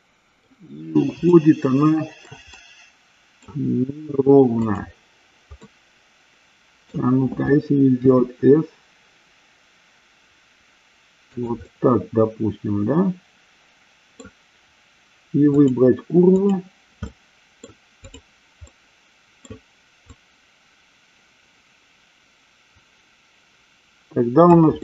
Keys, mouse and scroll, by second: 1.4 shift+scroll up 1, 1.5-2.4 shift+middle drag, 2.7 middle click, 4.8 click, 5.8-7.0 middle drag, 8.1 s, 11.4 click, 11.8-14.3 middle drag, 17.3 middle click, 18.3 click, 18.8-19.7 middle drag, 20.3-24.7 drag.